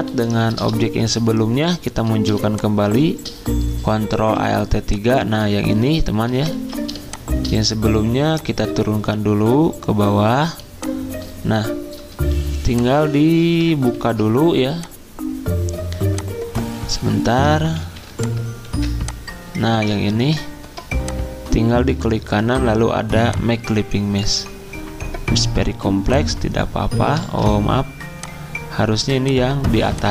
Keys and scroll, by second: 0.1 alt+3, 4.2 v, 6.5 z, 14.0 alt+2, 17.8 2, 18.6 2, 20.0 z, 27.2 ctrl+z.